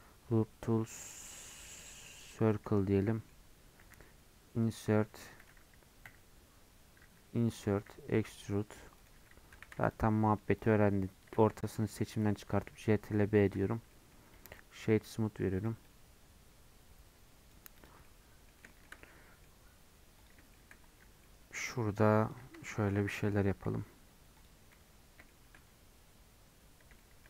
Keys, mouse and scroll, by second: 3.0 middle click, 3.6 scroll up 1, 3.8 e, 9.9 shift+click, 10.7 shift+click, 11.5 2, 12.4 ctrl+b, 13.5 Tab, 13.7 scroll down 1, 13.9 middle click, 14.6-15.6 right drag, 15.6-18.0 drag, 18.0-19.8 middle drag, 19.8-20.2 scroll up 2, 20.2 click, 20.5 shift+middle click, 21.0 Tab, 21.2 middle click, 22.1 3, 22.3 click, 22.7 shift+middle click, 23.6 i, 24.6-25.0 scroll down 2, 25.3-26.6 shift+middle drag, 26.6-27.0 scroll up 1, 27.0-27.2 shift+middle drag.